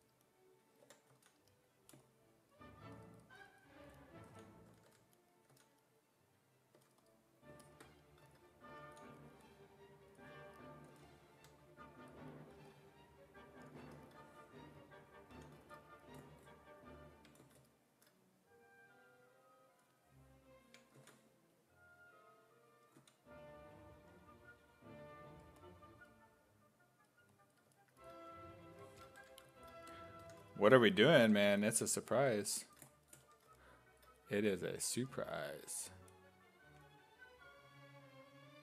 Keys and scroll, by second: 0.9 5, 1.1 s, 4.1-5.5 typing, 6.8 2, 8.9 s, 10.9 s, 11.4 2, 15.4 e, 21.0 ctrl+z, 23.0 ctrl+z, 29.2 1, 31.3 1, 33.3 1.